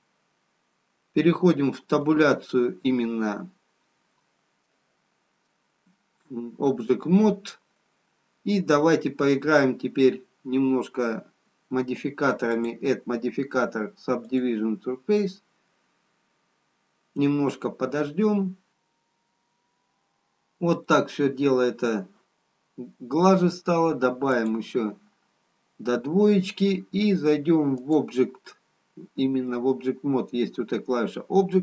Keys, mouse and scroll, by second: 0.7 click, 2.5 Tab, 3.4 middle click, 8.7 scroll up 1, 9.5 scroll up 2, 10.9-13.3 scroll down 1, 15.0 click, 20.1-20.8 scroll up 1, 21.4 middle click, 21.4-21.9 scroll down 1, 24.6 click, 28.2 click.